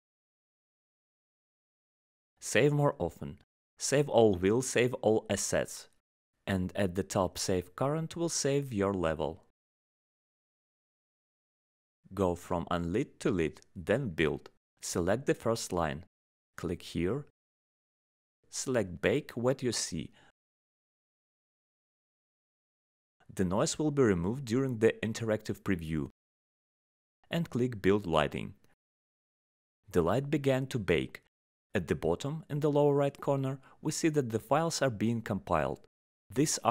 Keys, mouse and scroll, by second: 2.4 click, 3.9 click, 11.6 click, 13.2 click, 14.2 click, 15.1 click, 18.5 click, 19.4 click.